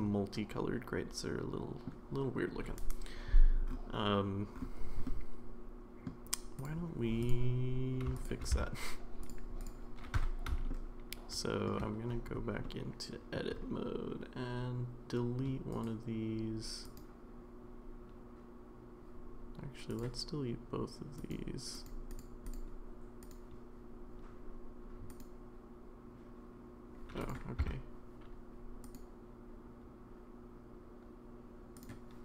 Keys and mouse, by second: 5.1-6.1 middle drag, 7.2 drag, 8.2 shift+click, 8.5 x, 9.6 drag, 10.2 Tab, 10.7-11.7 shift+middle drag, 12.7 middle click, 15.7 right click, 16.8 click, 20.0-21.4 drag, 21.8 click, 22.1 click, 22.5 click, 23.3 click, 25.2-27.1 drag, 27.6 Tab, 28.9 click, 31.8 click.